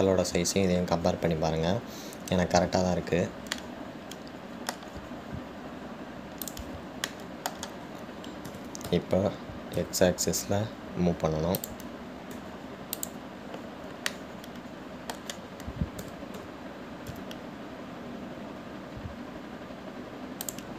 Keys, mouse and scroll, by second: 0.3-1.7 scroll up 4, 1.7-2.5 scroll up 1, 2.5-3.6 scroll up 1, 4.0-4.7 scroll down 4, 4.7-7.8 middle drag, 7.8 click, 8.3-9.7 shift+middle drag, 9.7 g, 13.5 `, 15.3-17.2 middle drag, 17.2 g.